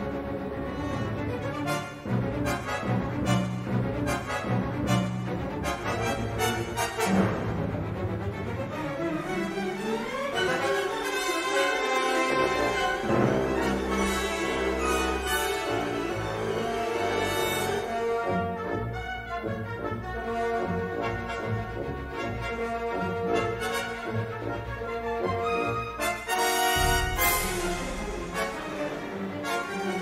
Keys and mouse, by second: 0.3 shift+click, 1.5 click, 2.3 s, 3.0 g, 6.9 middle click, 7.8 middle click, 8.8 3, 9.4 alt+shift+click, 12.6 g, 15.7 middle click, 17.0 alt+shift+click, 17.2 alt+shift+click, 18.7 click, 19.7 s, 20.3 g, 22.6 middle click, 23.3 ctrl+r, 26.8 3, 27.0 click, 27.3 shift+click, 29.2 click, 29.9 s.